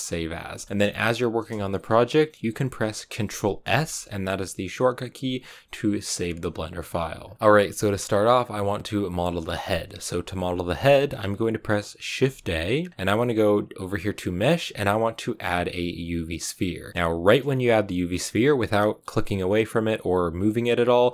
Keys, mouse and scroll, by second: 0.6-16.9 shift+middle drag.